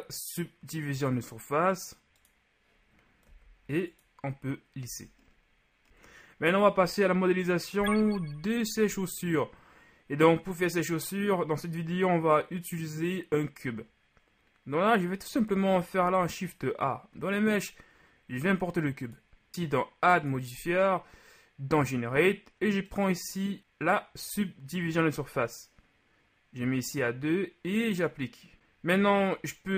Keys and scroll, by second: 4.9 a, 5.9 a, 16.0 shift+a.